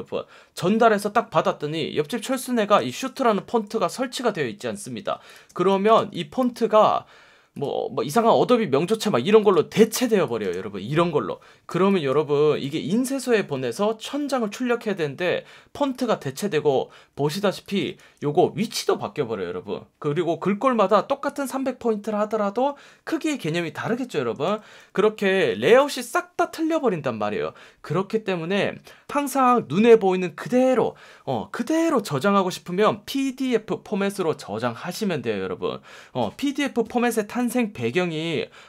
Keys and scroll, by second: 2.6 space, 3.1 space, 3.8 F1, 5.0 F1, 5.5 space, 10.0 space, 11.6 space, 17.0 super+z, 18.0 shift+super+z, 25.3 super+z.